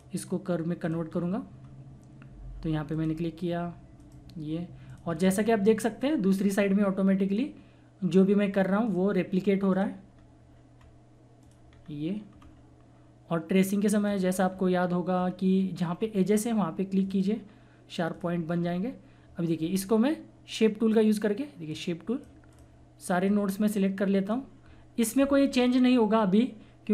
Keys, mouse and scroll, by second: 1.1 scroll down 1, 2.9 click, 5.3-5.8 scroll down 1, 7.2 click, 7.2-7.8 scroll up 1, 10.1-10.7 scroll down 1, 11.4 click, 11.7 scroll down 1, 12.4 scroll up 1, 14.0 click, 14.0 typing, 14.5 scroll down 1, 15.2-15.9 scroll up 1, 17.0 click, 18.5 scroll down 1, 18.5 typing, 20.6 typing, 21.6-26.9 drag.